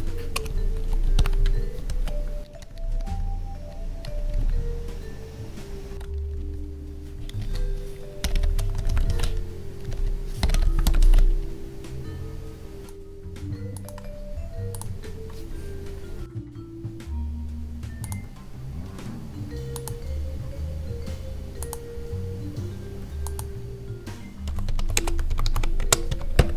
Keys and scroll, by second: 0.4 space, 1.2 ctrl+v, 2.4 ctrl+Tab, 2.5 Down, 4.3 ctrl+Tab, 5.9 ctrl+s, 6.3 Down, 9.1 ctrl+s, 9.9 Down, 11.0 ctrl+s, 24.8 space, 25.7 space.